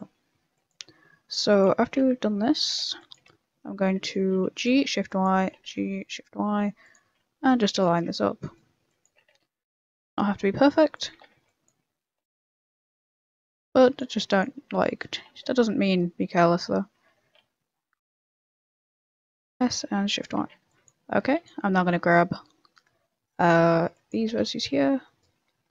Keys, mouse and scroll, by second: 0.0-3.1 typing, 2.0 Tab, 4.7 a, 4.9 b, 5.4 g, 7.0 a, 7.3 b, 7.9 ctrl+r, 8.8 b, 9.1 g, 11.1 a, 11.3 b, 11.9 g, 13.2 a, 13.7 b, 14.5 e, 15.1 s, 18.4 e, 19.0 s, 20.4 a, 20.6 b, 23.6 a, 23.8 b, 24.2 g, 25.5-25.7 scroll up 4.